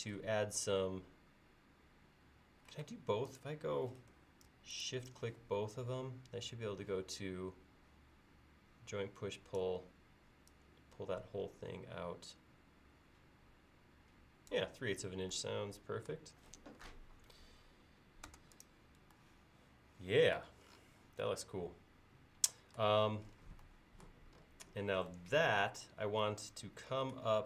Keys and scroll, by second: 2.8 space, 18.3 space.